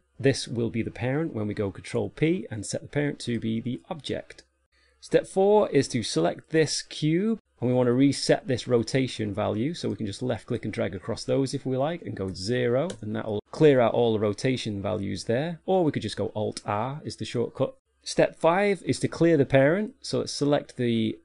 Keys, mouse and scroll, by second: 4.7 ctrl+p, 6.3 right click, 7.0 right click, 10.3 click, 20.5 right click.